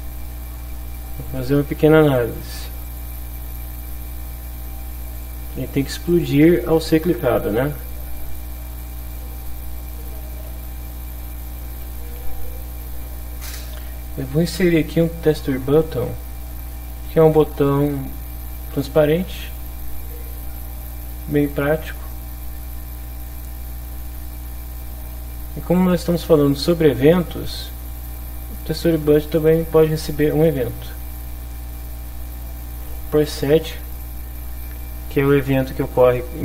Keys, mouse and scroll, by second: 1.0 click, 2.8 click, 5.2 click, 5.7 click, 6.1 click, 8.8 click, 9.5 click, 11.8 b, 11.8 u, 12.0 t, 18.8 click, 20.1-22.0 drag, 23.0-25.3 drag, 28.0 click, 29.3 click, 31.0 click, 33.1 click.